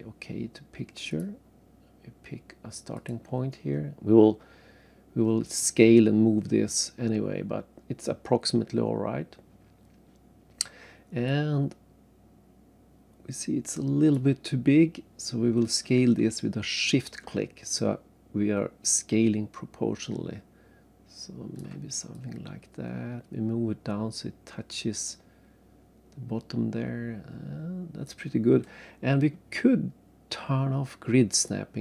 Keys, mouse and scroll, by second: 1.1 click, 2.9 click, 5.4 click, 6.8 scroll down 3, 7.5 scroll up 2, 9.1-10.2 scroll up 1, 11.3 click, 17.8 shift+click, 22.1 click, 31.3 click.